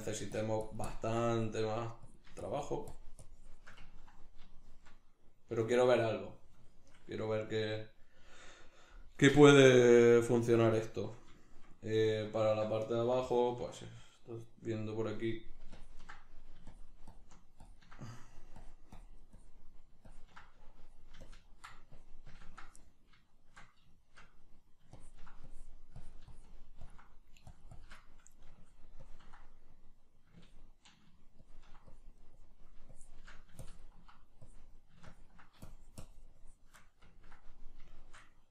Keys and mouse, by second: 3.9-15.8 ctrl+middle drag, 15.8-23.4 ctrl+drag, 23.4-25.0 shift+middle drag, 25.0-28.0 ctrl+drag, 28.0 middle click, 28.6-36.8 ctrl+drag, 36.8-38.5 middle drag.